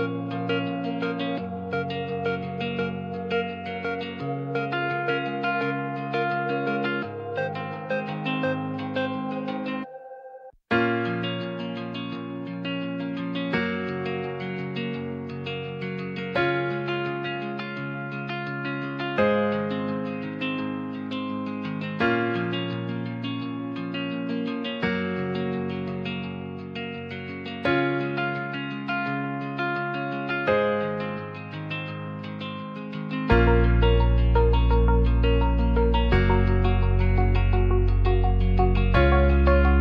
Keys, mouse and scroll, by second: 0.1-1.5 drag, 2.2 s, 2.6 z, 4.7 KP_0, 4.9 KP_Enter, 5.5 Tab, 5.7 middle click, 6.5-7.4 middle drag, 8.5 click, 9.1 click, 10.4 click, 14.0 ctrl+a, 15.5 q, 16.2 q, 17.9-18.2 drag, 18.3 click, 21.2 shift+middle drag, 21.7 click, 23.5 middle click, 23.8 click, 24.3 shift+middle drag, 25.0 space, 25.4 space, 28.0 click, 29.5-31.2 middle drag, 32.1 space, 32.5 space, 32.7 space, 33.2 space, 34.0 ctrl+z, 34.2 ctrl+z, 35.6 space, 38.2 click, 38.8 click.